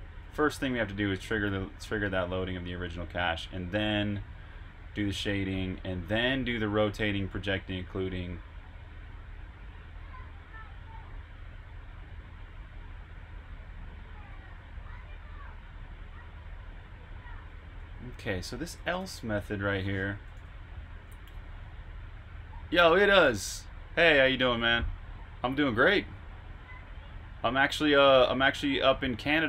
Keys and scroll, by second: 0.4-0.9 typing, 6.4-7.4 typing, 17.6-21.0 typing.